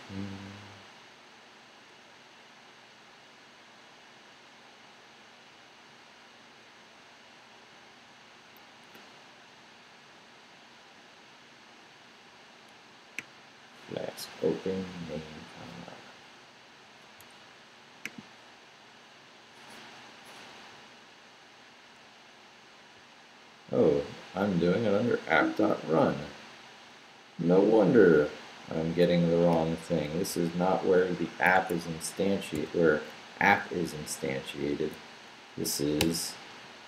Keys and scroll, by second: 20.7 Left, 22.0 Left, 25.2 Down, 27.0 Right, 28.0 Right, 29.2 Right, 30.3 Right, 30.3 c, 31.5 Escape, 32.5 v, 32.8 Right, 35.1 Right, 36.0 d.